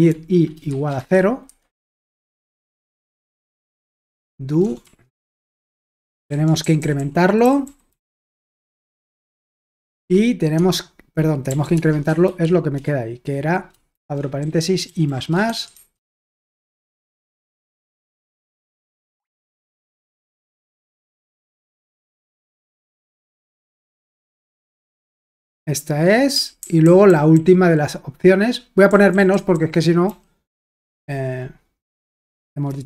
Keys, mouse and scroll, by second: 0.0-1.8 typing, 2.8 typing, 4.8-9.1 typing, 5.6 Return, 10.0 Return, 10.6 Tab, 11.2-12.3 typing, 13.7-17.6 typing, 17.2 Escape, 18.7-21.6 typing, 23.3-24.4 typing, 26.3-27.8 typing, 28.9-30.4 typing, 32.4-32.8 typing.